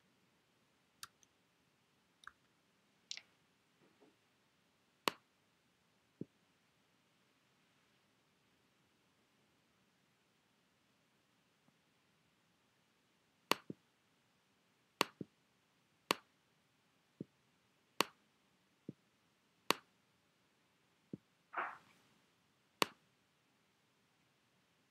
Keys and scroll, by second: 2.3 ].